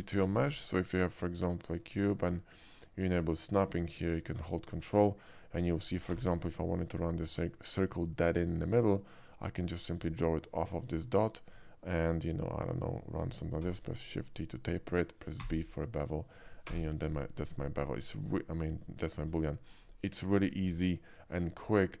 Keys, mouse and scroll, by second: 0.0 click, 0.7 shift+a, 1.8 click, 2.5 shift+middle click, 3.8 shift+click, 4.0 shift+click, 5.9 ctrl+middle click, 6.9 click, 6.9 d, 9.4-10.9 ctrl+drag, 13.7 shift+t, 15.5 b, 16.1 click, 16.7 space, 17.5-19.1 middle drag, 20.6-21.8 middle drag.